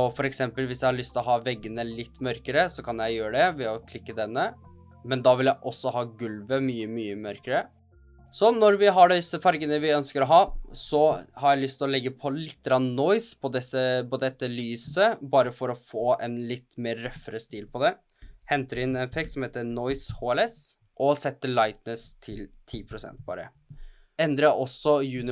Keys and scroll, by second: 18.5-21.1 typing, 22.5-24.6 typing.